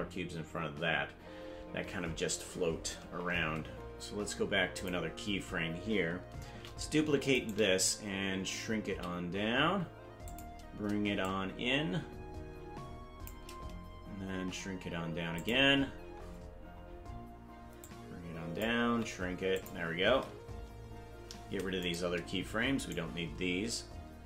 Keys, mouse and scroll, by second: 4.7 click, 6.6 shift+d, 8.8 s, 11.2-13.3 shift+drag, 14.3 s, 15.7-17.8 scroll down 8, 17.8 click, 18.8 s, 20.4-21.0 scroll up 8, 21.8 right click, 22.8 shift+right click.